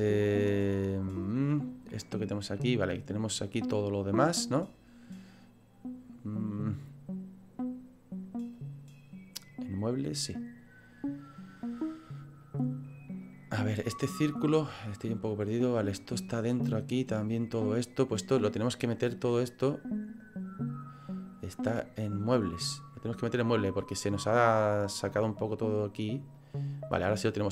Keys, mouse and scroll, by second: 0.9-2.1 scroll up 1, 2.1-4.8 scroll down 9, 6.8-8.5 scroll up 1, 8.5 click, 8.5-9.8 scroll up 3, 10.8-11.6 scroll down 2, 11.6-12.4 scroll down 1, 12.4 click, 13.2 click, 18.6 click, 21.8 click, 23.6 click, 25.0-26.3 scroll down 7, 26.3 click.